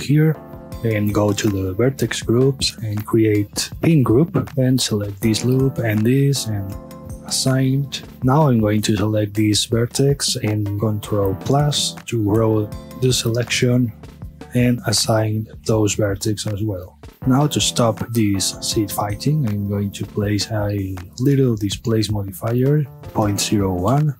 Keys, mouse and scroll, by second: 0.7 click, 2.7-4.5 drag, 4.5 scroll up 1, 4.7-5.5 middle drag, 5.5 alt+shift+click, 6.7-8.0 drag, 8.0 shift+middle click, 8.3 scroll up 1, 8.5-9.0 middle drag, 9.0 scroll up 1, 9.3-10.8 middle drag, 10.8 ctrl+KP_Add, 12.4 scroll down 1, 12.9-15.6 middle drag, 15.6 click, 16.4-17.0 middle drag, 17.0 a, 17.1 middle click, 17.3 scroll up 1, 17.5-19.0 middle drag, 19.0 click, 19.5 click, 20.2-24.0 drag, 24.0 KP_Enter.